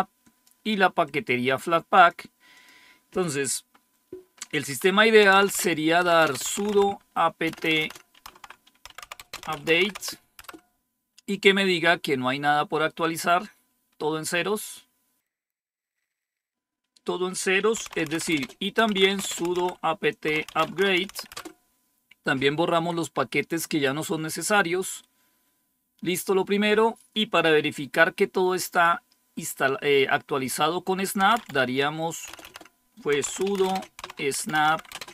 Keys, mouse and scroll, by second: 0.9-2.0 drag, 2.5 click, 4.9-10.4 typing, 17.5-21.5 typing, 30.9-35.1 typing.